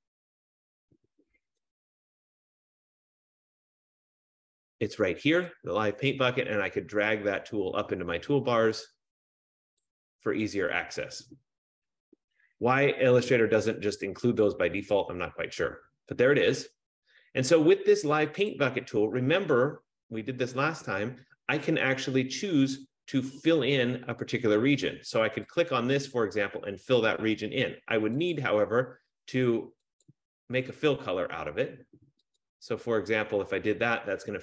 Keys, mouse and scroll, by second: 1.2-1.5 scroll up 1, 9.9-15.0 drag, 15.5-17.5 drag, 18.7 click, 25.7 click, 28.5 click, 30.3 click, 32.6 click.